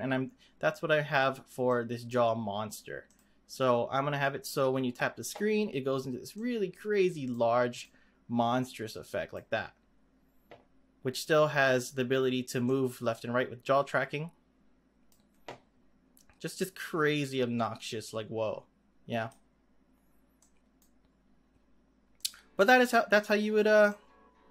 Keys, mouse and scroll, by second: 1.7-3.1 drag, 4.5-7.8 drag, 8.8-11.9 drag, 12.6-15.7 drag, 17.2-19.5 middle drag, 19.5-20.3 scroll down 1, 20.3-22.2 drag, 23.1-24.5 drag.